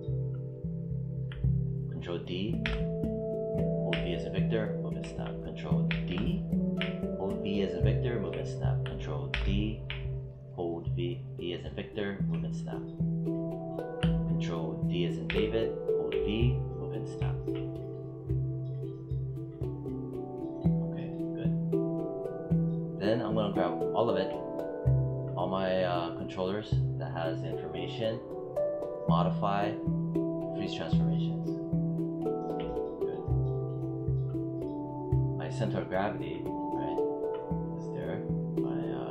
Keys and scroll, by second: 2.5 ctrl+d, 3.8 v, 5.7 ctrl+d, 6.6 v, 9.2 ctrl+d, 9.8 v, 15.1 ctrl+d, 15.9 v.